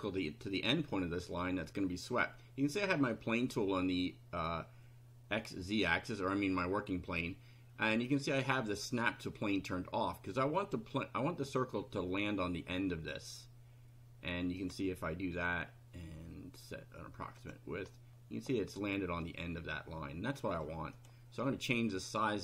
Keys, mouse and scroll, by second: 10.6 click, 14.6 click, 17.4 click, 17.9-20.8 middle drag, 21.0 click.